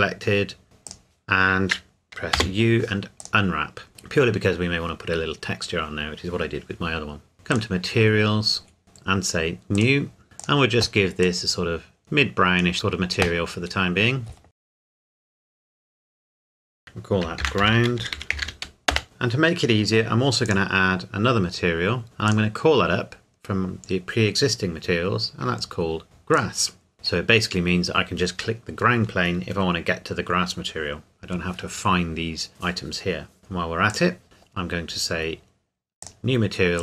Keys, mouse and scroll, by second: 0.8 click, 2.3 u, 3.2 click, 3.9 Tab, 7.5 click, 8.7 scroll up 1, 8.8 Tab, 9.7 click, 13.7-14.0 scroll down 1, 14.6 click, 15.9 middle click, 16.4 scroll up 1, 16.6 click, 17.4-18.4 typing, 18.9 Return, 20.4 click, 24.3 click, 26.3 click, 33.9 click, 36.0 click.